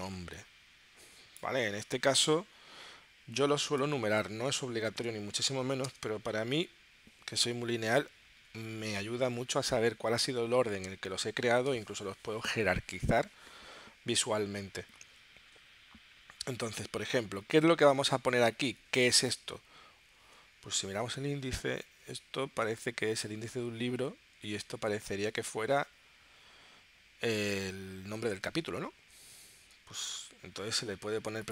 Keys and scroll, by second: 3.5-5.9 typing, 20.2 super+Tab.